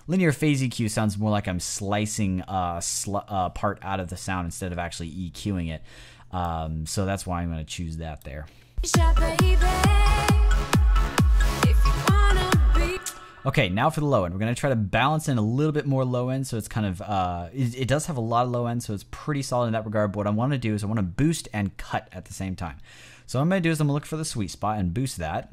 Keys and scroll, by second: 8.6 space, 12.8 space, 25.4 space.